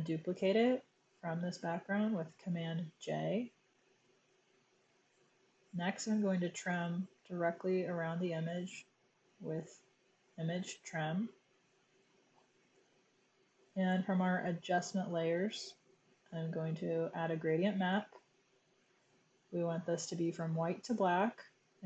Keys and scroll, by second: 2.3 super+j.